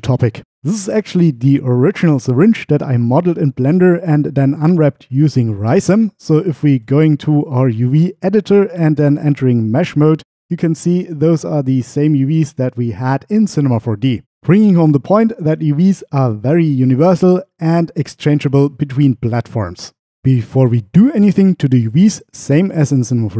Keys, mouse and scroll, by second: 6.9-7.9 drag, 9.5 Tab.